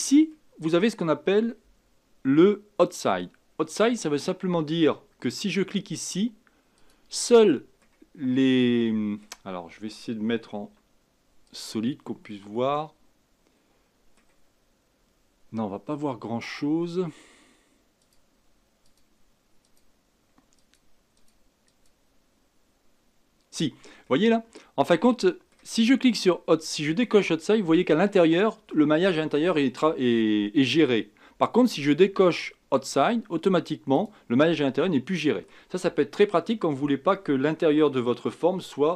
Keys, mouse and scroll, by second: 0.3 middle click, 1.1-1.5 scroll up 4, 3.5 scroll down 1, 6.7 click, 7.5 middle click, 8.1 scroll down 2, 8.8-10.7 middle drag, 10.7 z, 12.3-15.4 middle drag, 18.0 click, 18.8 click, 19.6 click, 20.6 click, 21.1 click, 21.6 click, 24.0-27.1 middle drag, 27.1 click, 27.8-30.9 middle drag, 33.9 click, 34.8-38.0 middle drag.